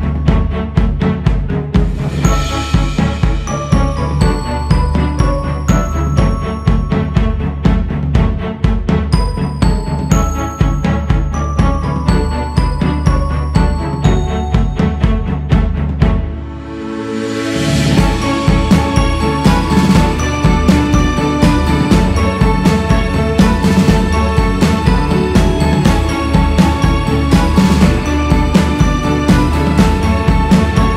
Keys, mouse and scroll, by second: 2.5-4.2 scroll down 2, 4.2 click, 4.8-5.1 scroll up 1, 5.1-8.1 drag, 8.1 ctrl+z, 9.3-12.5 drag, 14.8 shift+s, 15.2 f, 16.5-21.4 drag, 22.7-25.8 drag, 25.8 x, 26.0 f, 28.4 click, 28.9-30.0 scroll up 4, 30.0-30.9 drag.